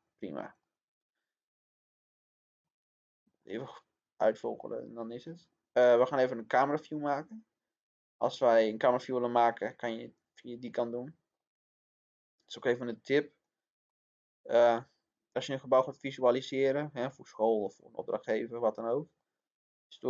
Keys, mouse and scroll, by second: 0.3 click, 2.8-3.3 scroll down 1, 3.3 middle click, 4.5-17.6 drag, 17.6-18.0 scroll down 1, 19.1 click.